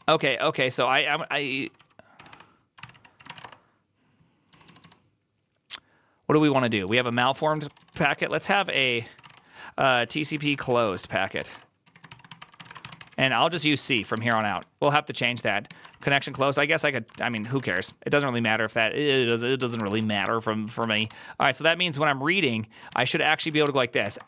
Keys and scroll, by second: 0.0-5.0 typing, 2.6 ctrl+c, 2.8 ctrl+c, 6.5-14.9 typing, 15.6 Tab, 15.7 ctrl+c, 16.0 ctrl+c, 16.1-20.8 typing, 17.0 ctrl+c, 20.5 ctrl+c, 20.8 Return, 20.9 ctrl+d, 21.3 ctrl+d, 21.9-24.2 typing.